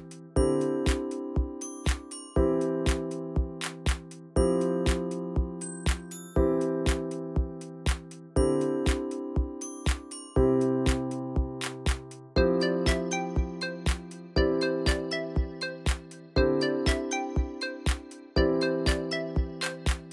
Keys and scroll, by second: 17.5 ctrl+c, 19.0 ctrl+v, 19.2 Return.